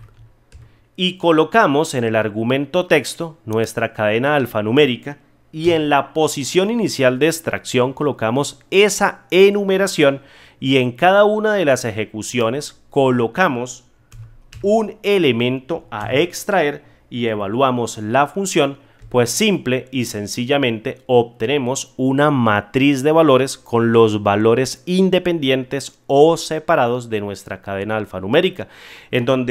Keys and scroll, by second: 18.9 F9.